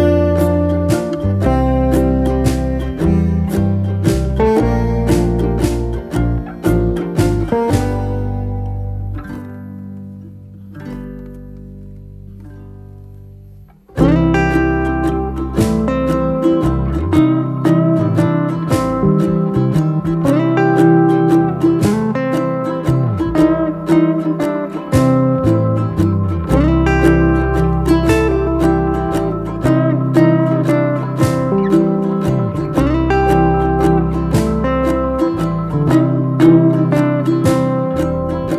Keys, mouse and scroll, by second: 24.0 ctrl+d, 26.4 ctrl+click, 27.6 ctrl+d, 29.6 ctrl+click, 31.1 ctrl+d, 32.4 ctrl+click, 32.9 ctrl+d, 33.7 ctrl+click.